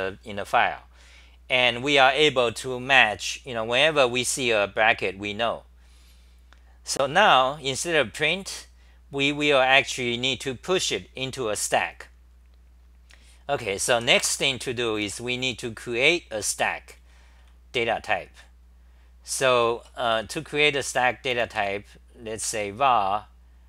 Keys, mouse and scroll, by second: 3.8-6.9 scroll up 1, 6.9-7.8 scroll up 6, 13.9 d, 17.0 c, 17.2 c, 17.4 c, 19.5 Return, 19.7 Return, 20.0 c, 21.3 u.